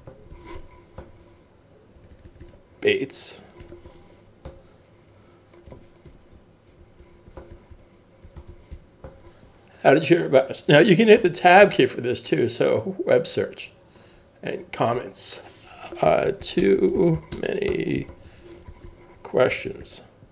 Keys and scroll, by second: 0.0-1.9 typing, 3.4-9.9 typing, 4.5 Tab, 15.8-19.4 typing.